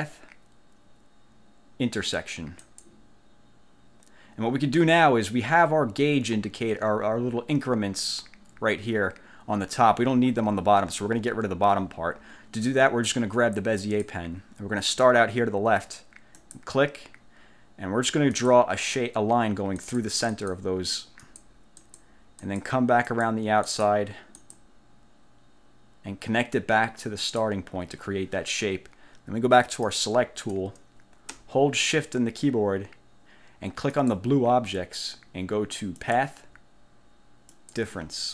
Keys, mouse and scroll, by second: 2.8 click, 14.0 click, 16.5 click, 18.4 click, 19.9 click, 20.4 click, 21.4 click, 22.0 click, 22.6 click, 23.2 click, 23.8 click, 24.5 click, 27.4 click, 29.8 click, 34.0 shift+click, 36.2 click, 37.6 click.